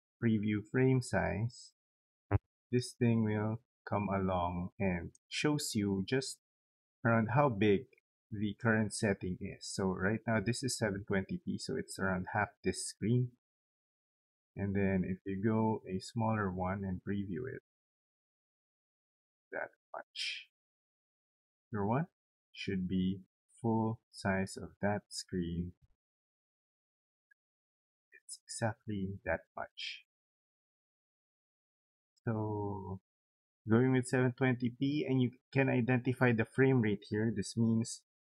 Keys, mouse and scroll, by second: 1.1 click, 2.4-4.7 drag, 8.2-11.9 drag, 13.9 click, 15.0 click, 15.7 click, 16.4 click, 17.5-19.0 drag, 19.8 click, 20.7 click, 21.6 click, 23.1 click, 24.0-28.9 drag, 30.0 click, 30.9 click, 32.9 click.